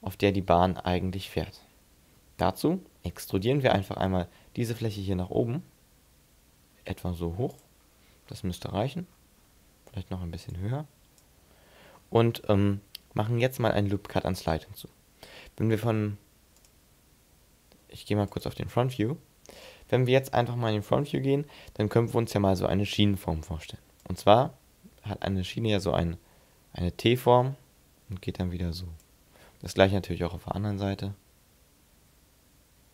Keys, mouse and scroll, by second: 0.8-1.3 scroll up 5, 1.6 shift+middle click, 2.3 scroll up 2, 3.6 e, 7.6 click, 7.8-9.0 scroll down 12, 9.0-9.7 scroll up 6, 10.5 click, 11.6-12.0 scroll down 3, 12.0-13.3 scroll up 8, 17.6 click, 23.4-24.0 d, 24.0 click, 29.1 d, 29.4-30.1 d, 30.1 click.